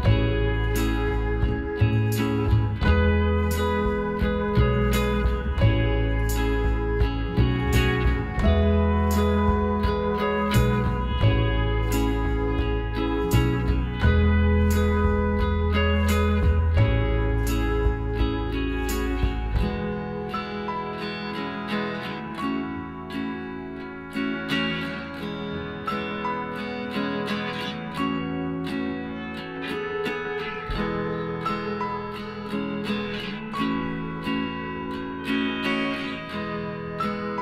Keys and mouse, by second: 1.8 k, 6.5-8.1 middle drag, 8.1-9.8 drag, 9.4-11.0 right drag, 10.1 g, 11.3-12.9 middle drag, 11.8 a, 12.1 a, 12.9 w, 14.5-15.5 middle drag, 15.5 a, 16.1-18.0 right drag, 17.1 z, 18.0-20.0 middle drag, 20.8 z, 21.2-23.0 middle drag, 23.1 middle click, 23.9 click, 24.3-25.5 middle drag, 24.6-26.3 right drag, 25.5 g, 26.7-28.4 right drag, 27.0 g, 28.1 middle click, 29.9-31.5 right drag, 30.6 g, 31.8-33.8 right drag, 32.0 g, 33.2 click, 33.8-35.2 middle drag, 36.5 click, 36.7-37.4 middle drag.